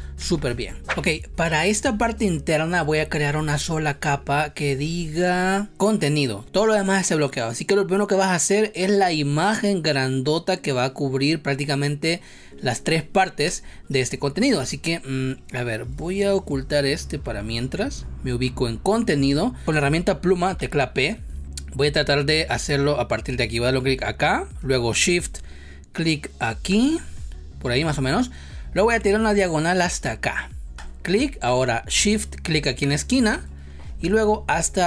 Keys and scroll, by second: 0.1 ctrl+z, 13.4 space, 19.6 space, 20.5 p.